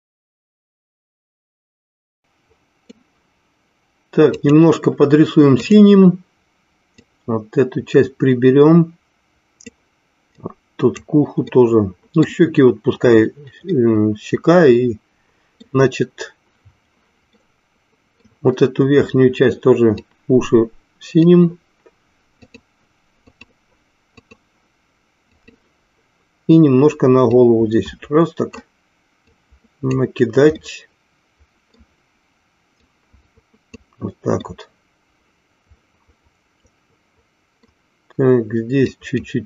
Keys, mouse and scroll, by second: 2.2 middle click, 4.3-5.9 drag, 7.1-9.9 drag, 10.5 click, 11.6 middle click, 13.7-15.7 middle drag, 17.3 middle click, 20.2-21.5 drag, 22.5 click, 24.2-25.5 drag, 27.5-28.7 drag, 29.4 click, 30.7-31.8 middle drag, 33.0 click, 34.6-37.7 middle drag, 39.0 click.